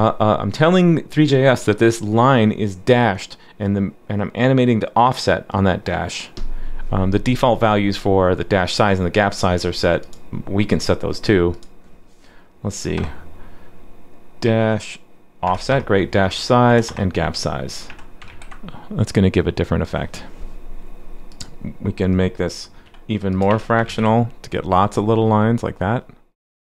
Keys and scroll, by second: 18.3 super+s, 23.8 super+s.